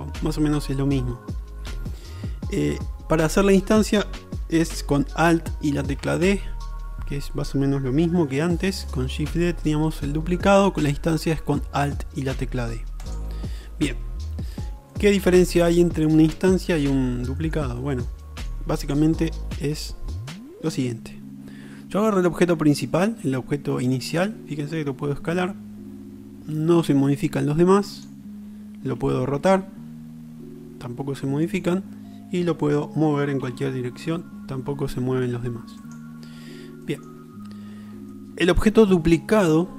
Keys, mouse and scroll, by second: 5.9 alt+d, 7.2-7.6 right drag, 7.6-14.9 drag, 14.9-15.3 middle drag, 15.4 middle click, 15.6-18.5 middle drag, 24.2 s, 25.8 click, 26.6-28.2 right drag, 28.2-30.2 middle drag, 29.2 r, 33.5 g, 36.9-38.2 drag, 38.2-39.7 middle drag.